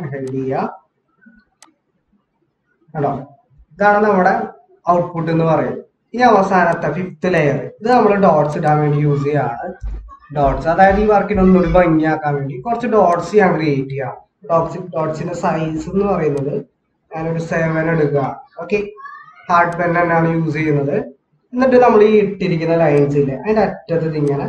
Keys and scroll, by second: 9.8-12.1 typing, 14.5-16.0 typing, 18.1 typing, 18.9 ctrl+=.